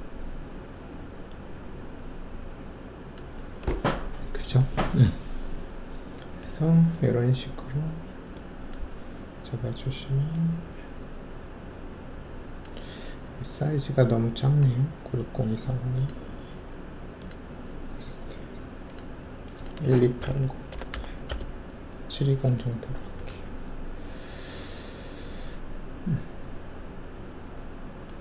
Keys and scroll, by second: 20.0-20.9 typing, 21.3 Return, 24.5 shift+F1.